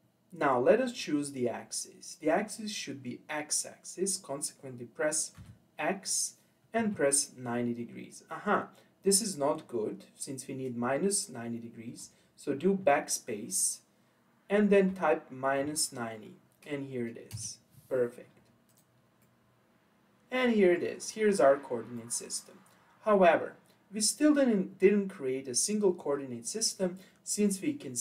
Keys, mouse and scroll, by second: 18.7 click, 19.2-21.1 middle drag, 21.1-21.5 scroll up 2, 21.5-22.0 scroll down 3, 22.0-25.0 middle drag.